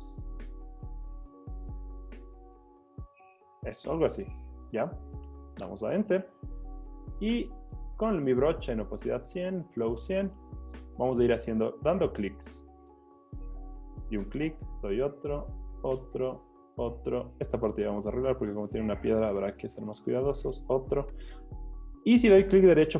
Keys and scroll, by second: 5.7 Return.